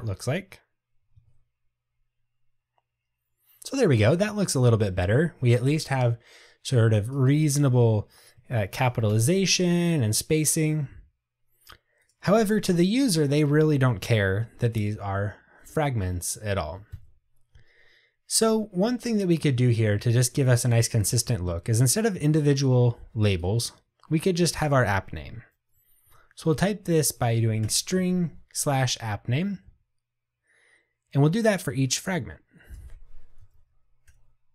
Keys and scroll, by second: 27.7 Return, 34.2 Return.